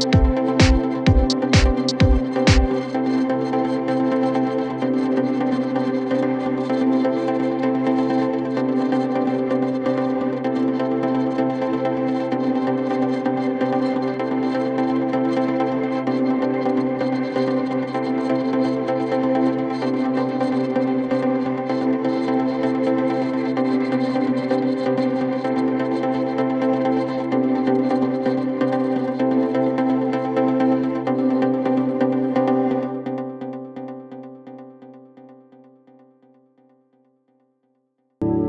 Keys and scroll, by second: 10.4 g, 26.1 F3, 26.7 Escape.